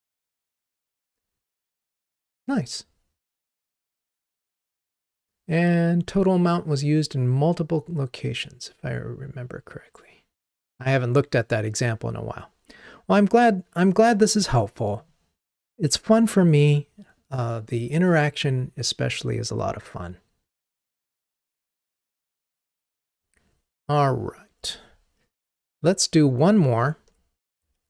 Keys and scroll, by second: 25.9 ctrl+Tab.